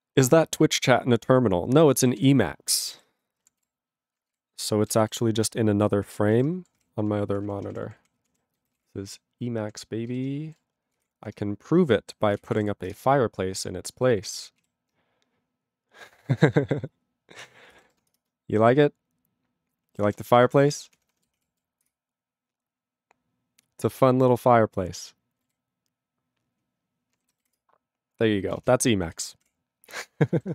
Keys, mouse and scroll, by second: 2.2 ctrl+s, 4.4 ctrl+g, 5.5 ctrl+g.